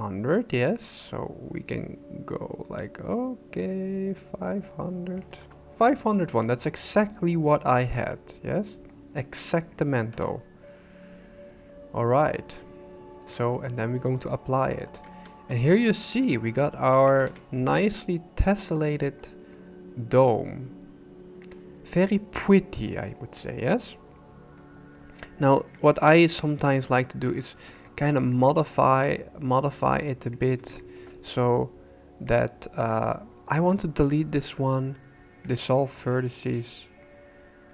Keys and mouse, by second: 8.5 middle click, 10.1 KP_1, 13.5-14.5 drag, 15.1 Tab, 15.7-16.9 middle drag, 17.2 alt+a, 17.7-19.2 drag, 19.5 click, 21.4 right click, 22.1 middle click, 25.9 click, 28.4 right click, 31.1 s, 33.6 x, 36.2 click, 36.7 middle click.